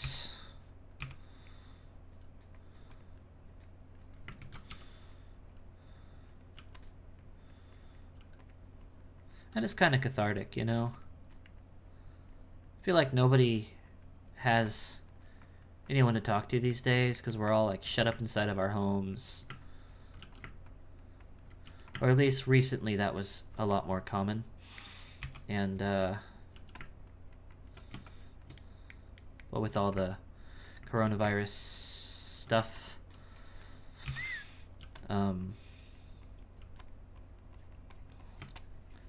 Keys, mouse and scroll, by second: 0.0 KP_1, 1.0 KP_1, 2.1 f, 3.2-4.3 drag, 4.3 ctrl+z, 4.7 g, 5.1-6.5 drag, 6.5 f, 7.2-8.2 drag, 8.2 f, 8.8 click, 9.6 f, 10.2 click, 11.3-14.5 drag, 14.9-16.4 drag, 16.4-17.8 middle drag, 18.3-20.2 ctrl+drag, 20.7 ctrl+click, 22.3-23.8 ctrl+drag, 23.8-25.2 middle drag, 25.2 KP_1, 26.5 f, 27.1-28.7 ctrl+drag, 28.7-29.7 middle drag, 30.2 ctrl+click, 31.6-32.6 ctrl+drag, 32.6 f, 34.0 KP_1, 35.4-36.6 drag, 37.1-39.0 drag.